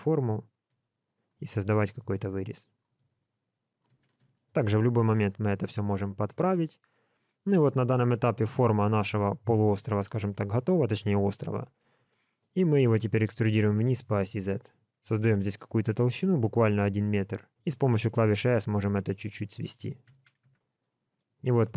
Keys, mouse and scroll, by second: 0.5 click, 0.7 g, 1.6 click, 1.8 g, 2.6 click, 2.9 g, 4.3 shift+middle click, 5.4-6.0 scroll down 2, 5.8 middle click, 7.9 middle click, 10.1 a, 11.2 KP_1, 12.1 shift+middle click, 12.6 scroll up 2, 13.6 e, 20.1 alt+a, 20.4 Tab, 20.8 middle click.